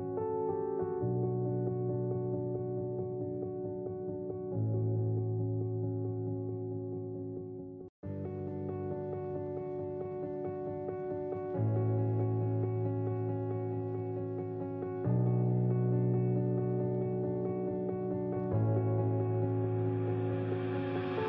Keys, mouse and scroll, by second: 0.5-1.6 middle drag, 2.3 a, 4.1 click, 5.4 click, 5.9 shift+a, 7.8 click, 10.0 click, 10.6 click, 11.1 click, 12.7 click, 13.3 h, 14.9 click, 15.8 ctrl+z, 16.3 click, 16.9 click, 17.4 click, 18.1 click, 18.5 middle click, 18.8 click, 20.1 click.